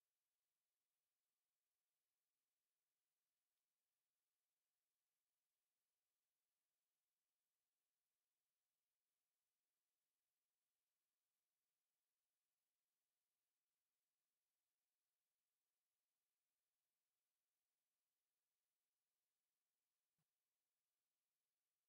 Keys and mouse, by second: 2.3-3.4 middle drag, 4.5 ctrl+shift+click, 7.1-7.6 middle drag, 8.1 alt+shift+z, 8.8 middle click, 10.2 middle click.